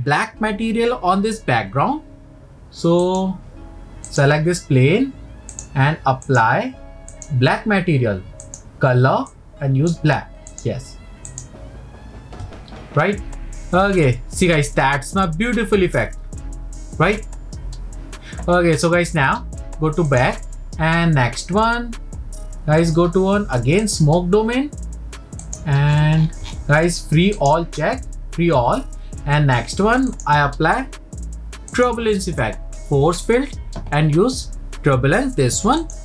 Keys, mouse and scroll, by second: 3.1 click, 4.1 click, 5.5 click, 6.3 click, 7.1-8.5 drag, 11.4 click, 20.1-23.2 drag, 23.8 click, 25.4 click, 25.9-27.1 scroll down 22, 27.4-30.2 drag, 31.7-34.9 drag.